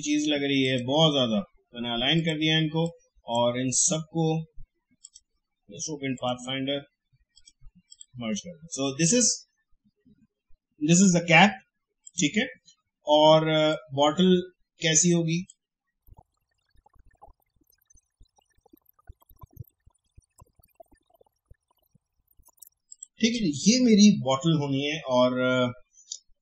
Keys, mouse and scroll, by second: 6.2 click, 12.0-19.6 drag, 20.2 alt+scroll down 1, 20.3 space, 20.6 a, 20.7-21.8 drag, 22.0 alt+scroll up 1, 22.2 click, 22.5 ctrl+shift+], 22.9 click.